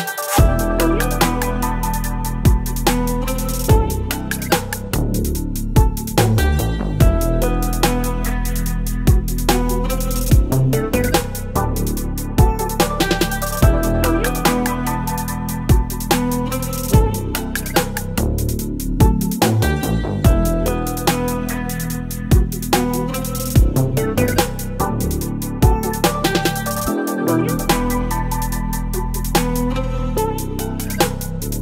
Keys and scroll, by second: 5.4 Return, 6.7 space, 12.4 ctrl+t, 13.5 Return, 16.4 space.